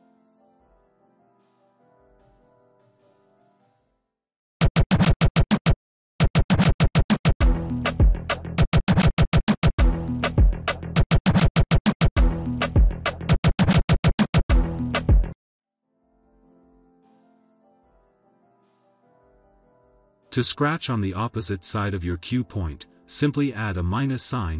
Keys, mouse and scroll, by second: 0.0-1.0 typing, 0.3 click, 1.8 click, 2.7 click, 3.9 click, 4.5 click, 6.1 click, 8.5 click, 9.5 click, 10.9 click, 20.1 BackSpace, 22.0 -, 23.4 Caps_Lock, 23.5 d.